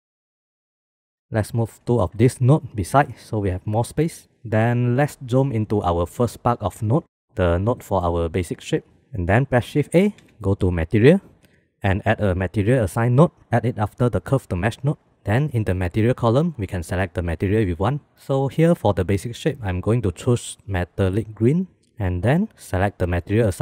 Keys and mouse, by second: 0.0 middle click, 0.8-1.6 middle drag, 2.3 g, 4.1 middle click, 4.2 click, 4.4 click, 5.2 middle click, 6.4 middle click, 7.6 middle click, 7.7 click, 9.2 shift+a, 16.5-21.5 drag, 22.2 click, 22.8 click.